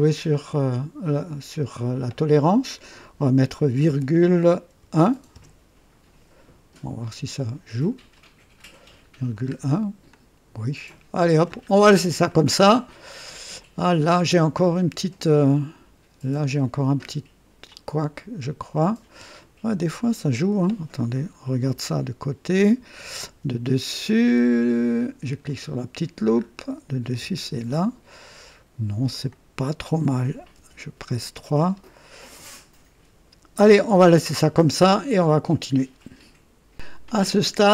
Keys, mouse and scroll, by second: 1.0 click, 3.8-5.3 typing, 5.3 KP_Enter, 8.1 click, 9.4-9.8 scroll down 1, 9.8 typing, 10.1-11.4 drag, 11.7 scroll down 1, 12.2 right click, 12.9-13.3 scroll down 1, 14.0 scroll up 1, 14.5-15.2 drag, 15.5 right click, 17.0 scroll down 1, 17.7-19.0 drag, 19.4 right click, 21.6 KP_3, 23.2 KP_1, 25.4 click, 26.3 scroll up 1, 27.2 KP_2, 28.3 right click, 29.3-30.0 drag, 30.7 KP_3, 31.6-31.9 scroll up 1, 32.0 scroll down 1, 32.4-34.1 drag, 34.3-34.7 scroll down 1, 35.0 right click, 35.6 typing.